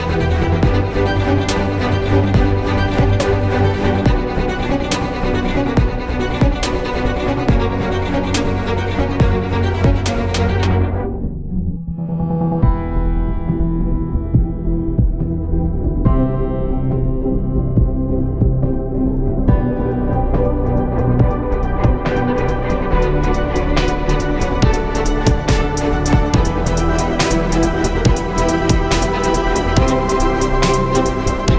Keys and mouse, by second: 4.1 r, 6.4 KP_3, 7.2 r, 9.3 ctrl+n, 10.5 drag, 12.9 r, 16.3 ctrl+Tab, 16.9-18.3 drag, 18.5 Tab, 19.3 Tab, 19.7 z, 20.1 ctrl+Tab, 21.5 z, 21.8 z, 22.3 c, 24.1 p, 24.9 Tab, 25.5 Tab, 26.3 z, 26.9 z, 28.1 z, 28.7 Tab, 30.1 Tab, 30.9 t.